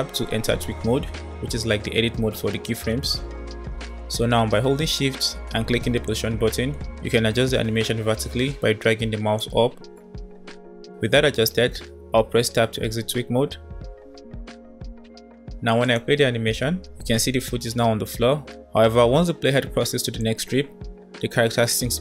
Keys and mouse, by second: 0.0 Tab, 6.2-9.4 shift+drag, 12.5 Tab, 13.9 KP_1, 15.5 click, 15.9 space, 17.3 space, 17.6 space, 17.8 space, 19.5 space, 19.8 space.